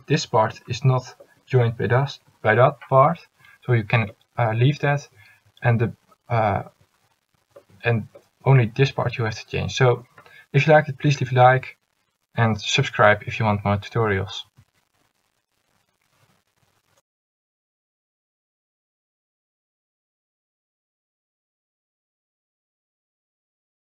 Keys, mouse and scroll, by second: 16.9 a.